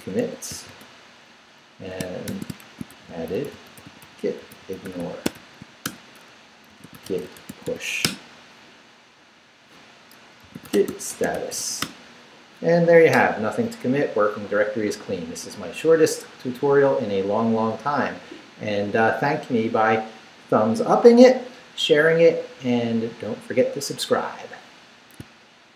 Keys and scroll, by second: 0.0-1.0 typing, 2.0-8.1 typing, 10.2-12.1 typing.